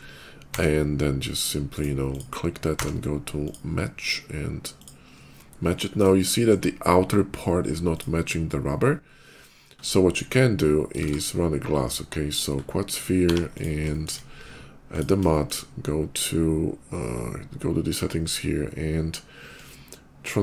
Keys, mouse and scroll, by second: 0.2 d, 1.6 right click, 1.9 click, 3.3 click, 3.7 scroll down 1, 4.6 click, 4.8 scroll down 1, 5.6 middle click, 6.0 shift+middle click, 7.6 shift+click, 8.6 shift+middle click, 9.3 middle click, 9.5 middle click, 9.6 middle click, 10.8 shift+a, 12.0 click, 12.4 middle click, 13.2 g, 13.4 click, 13.7 shift+middle click, 14.7 shift+click, 15.1 shift+middle click, 16.8 shift+middle click, 17.0 shift+middle click, 17.7 shift+middle click, 19.3-20.4 drag.